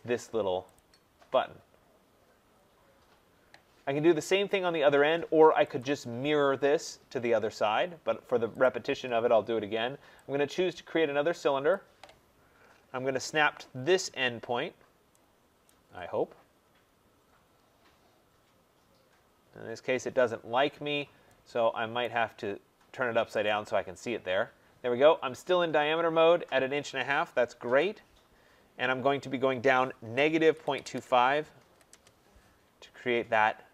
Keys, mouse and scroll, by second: 0.7 click, 2.4-2.9 scroll, 2.9 middle click, 3.1 middle click, 5.7 click, 5.7 scroll, 8.7 click, 11.7 click, 12.5-13.6 scroll, 15.6 right click, 15.8 scroll down 6, 16.4 scroll up 6, 22.0 right click, 23.4 click, 27.6 Return, 29.9-32.1 typing, 32.8 middle click, 32.9 middle click, 33.0 middle click.